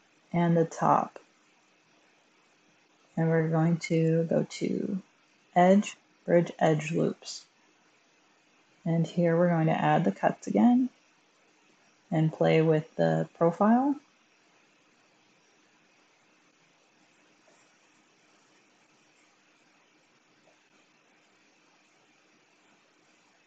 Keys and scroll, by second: 3.7 1.